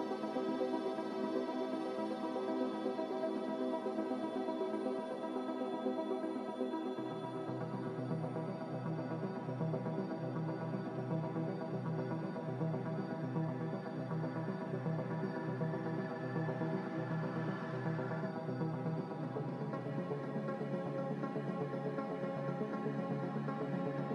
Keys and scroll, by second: 7.0-7.8 typing, 10.2-11.8 typing, 10.4 Return, 14.0-14.9 typing, 16.1 typing.